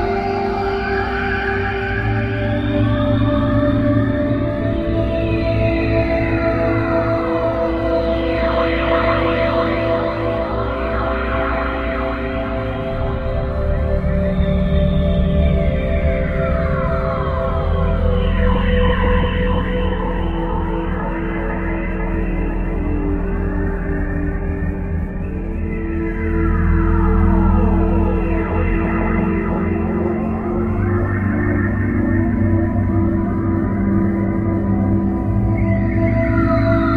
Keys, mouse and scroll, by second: 1.8-3.8 scroll up 12, 7.1 KP_0, 9.8 KP_1, 11.8 KP_7, 15.3 KP_3, 18.3 KP_5, 20.2 KP_5, 20.9 KP_5, 22.8 KP_7, 25.1 KP_1, 26.3 KP_3, 27.5-33.2 typing, 34.5 KP_2, 35.7-36.9 typing.